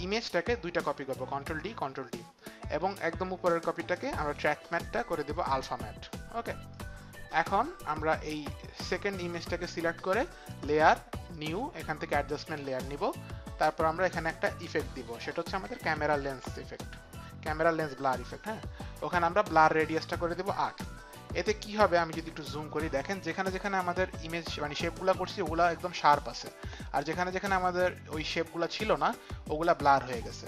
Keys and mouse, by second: 0.5 click, 1.2 ctrl+d, 1.6 ctrl+d, 3.9 click, 5.5 click, 6.7 click, 10.3 click, 11.3 click, 13.7 click, 15.5-16.7 typing, 18.1 click, 18.3 click, 19.6 click, 20.8 Return, 20.8 KP_8.